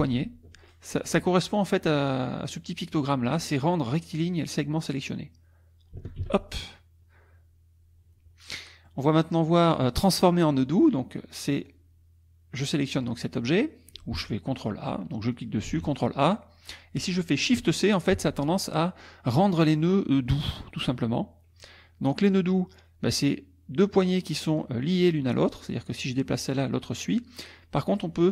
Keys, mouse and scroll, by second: 6.2 shift+c, 8.5 middle click, 10.0 middle click, 10.8 click, 11.7-13.2 drag, 14.8 click, 15.3 click, 15.7 ctrl+a, 18.1 shift+s, 22.3-24.8 drag, 26.0-28.3 drag.